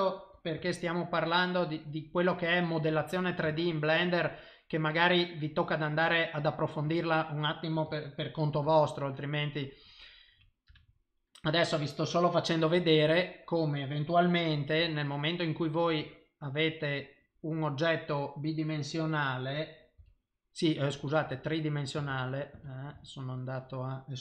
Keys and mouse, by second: 0.3 g, 2.7 middle click, 5.3 middle click, 6.9 Tab, 8.5 ctrl+r, 12.8 2, 13.1 click, 14.8 e, 16.6 click, 17.0 middle click, 19.9 g, 21.4 click, 22.1 ctrl+z, 22.5 ctrl+z, 22.9 ctrl+z.